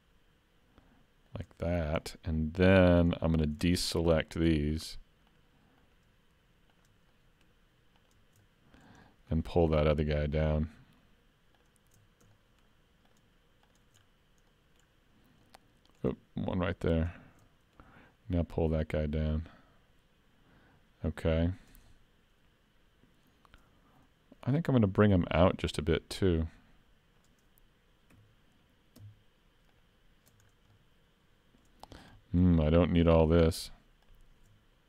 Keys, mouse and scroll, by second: 1.8 scroll up 1, 2.0 middle click, 3.2 shift+middle click, 3.7 middle click, 4.7 shift+click, 7.1 shift+middle click, 8.0 shift+click, 8.5 middle click, 9.0 shift+middle click, 10.1 shift+click, 12.0 scroll up 3, 12.3 shift+middle click, 13.1 shift+click, 14.1-14.6 scroll down 2, 14.5 middle click, 15.5 middle click, 17.0 shift+click, 17.5 middle click, 18.9 click, 21.9 middle click, 26.3 click, 28.1 3, 29.8 alt+click, 30.5-30.9 scroll down 2, 30.7 middle click, 32.2 middle click, 33.1 click, 34.0 shift+click.